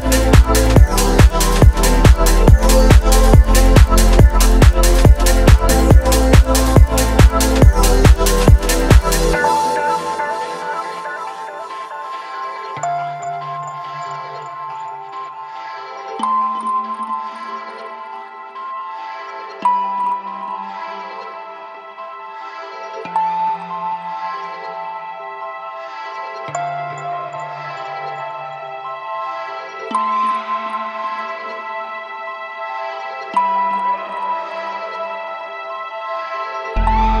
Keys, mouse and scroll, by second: 0.2-0.9 middle drag, 1.2 shift+middle click, 1.6 middle click, 2.2-2.6 shift+middle drag, 3.2-3.6 shift+middle drag, 4.1 shift+a, 6.7 ctrl+alt+KP_0, 7.7 v, 9.0 s, 9.3 a, 9.8 a, 9.9 a, 11.1-11.9 q, 13.6 click, 14.0 space, 16.5 space, 16.8 click, 17.7 shift+a, 19.6 click, 20.3 shift+a, 24.1 r, 25.0 z, 28.8 ctrl+click, 29.4 s, 33.6 KP_3, 33.8 KP_0, 34.3 click, 35.8 g, 36.2 z, 37.1-37.2 right drag.